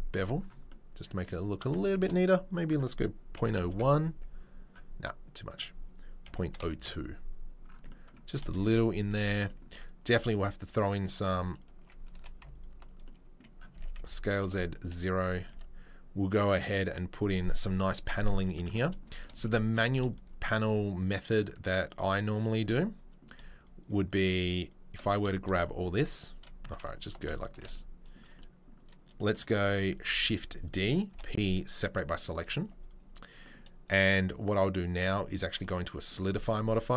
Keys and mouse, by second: 1.7 shift+middle click, 9.2 Tab, 10.1 Tab, 11.6 alt+middle click, 12.1 2, 12.5 alt+click, 12.6-22.1 alt+middle drag, 13.7 s, 15.5 Tab, 18.7 Tab, 19.6 3, 19.8 shift+click, 21.0 shift+click, 22.1 right click, 22.4-27.3 middle drag, 24.6-26.1 shift+drag, 27.0 alt+click, 27.6-34.2 middle drag, 30.0 shift+d, 31.1 p, 32.6 Tab, 35.7-36.9 drag.